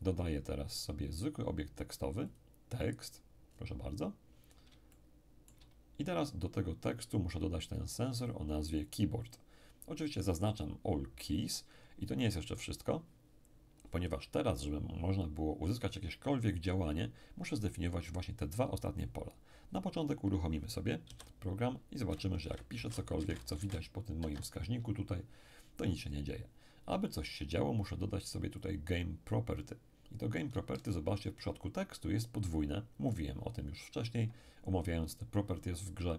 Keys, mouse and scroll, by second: 2.3 click, 3.4-4.3 scroll up 1, 4.3-4.9 scroll down 1, 4.9-6.4 shift+middle drag, 7.7 click, 9.2 click, 11.3 click, 21.0 p, 22.3-24.2 typing, 24.2 Escape, 28.6 click, 30.8-34.1 ctrl+middle drag.